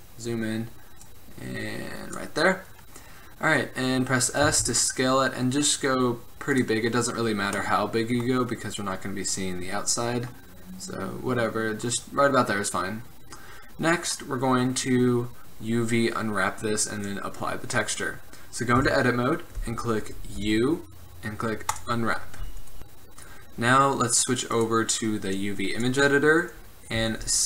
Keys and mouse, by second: 1.1-2.1 middle drag, 2.1 click, 4.5 s, 10.2-12.0 middle drag, 12.4 middle click, 13.2 middle click, 18.9 Tab, 20.5 u, 24.7-27.1 drag, 27.1 s.